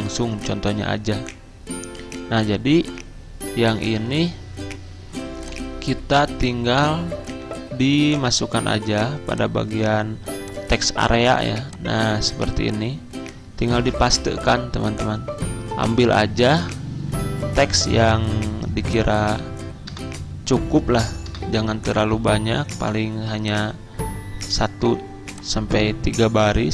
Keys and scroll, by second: 13.8 ctrl+v, 20.0 BackSpace, 21.3 BackSpace.